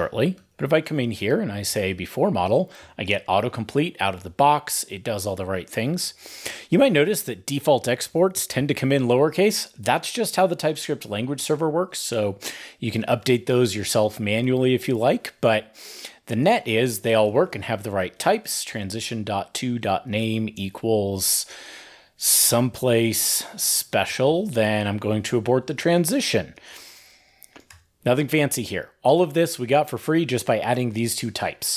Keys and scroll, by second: 0.1 ctrl+e, 0.3 ctrl+n, 0.7 shift+super+Left, 14.2 super+d, 24.2 ctrl+e, 28.0 super+s, 28.9 super+2.